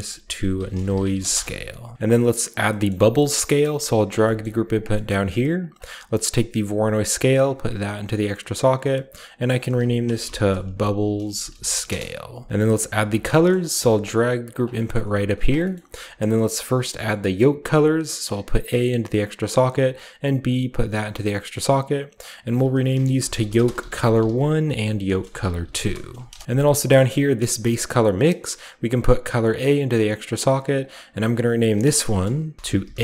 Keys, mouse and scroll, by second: 0.0-4.3 typing, 1.9-2.5 scroll down 1, 2.5-4.5 drag, 3.0 middle click, 3.8 middle click, 4.5 middle click, 4.7 scroll down 1, 4.8 scroll up 1, 5.4 middle click, 5.7 scroll up 1, 6.9 click, 8.6 click, 8.6 typing, 9.2 click, 10.0-13.6 typing, 12.4-12.8 scroll down 1, 12.5-13.8 drag, 14.3 click, 15.0 g, 15.2-16.9 drag, 15.3-18.1 scroll up 1, 16.3-16.8 middle drag, 16.3-18.6 typing, 16.9-18.1 middle drag, 18.1-23.2 drag, 22.8-26.6 typing, 26.8 middle click, 27.7 click, 29.2-30.1 drag, 30.6 click, 30.7-32.6 drag, 30.8 typing, 32.3-33.0 typing.